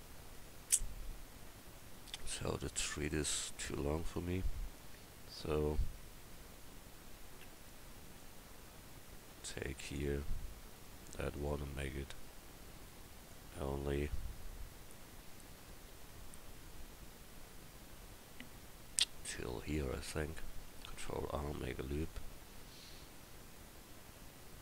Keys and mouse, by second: 1.8-2.8 right drag, 2.8 Tab, 7.8-9.6 right drag, 9.6-13.3 drag, 10.7-13.1 right drag, 13.6-15.9 middle drag, 15.9 ctrl+z, 20.9 ctrl+r.